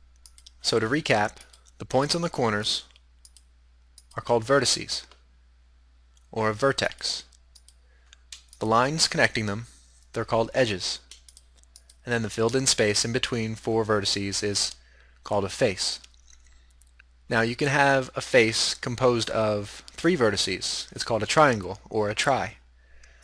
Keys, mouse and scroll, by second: 1.5-5.8 right drag, 6.9-10.4 right drag, 11.4-13.8 right drag.